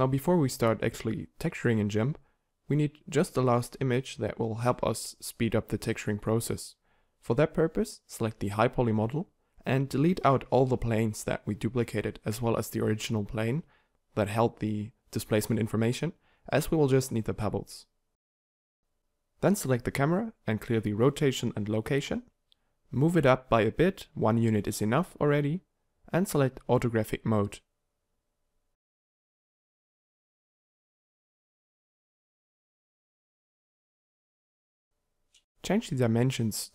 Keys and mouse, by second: 1.8 Tab, 8.2 Tab, 9.6 KP_7, 11.2-13.9 typing, 14.8 ctrl+super+z, 14.9-16.6 typing, 17.6 Tab, 18.4 shift+a, 19.9 alt+r, 20.3 alt+g, 21.0 m, 21.8 1, 23.3 g, 26.2 g, 32.8 KP_0.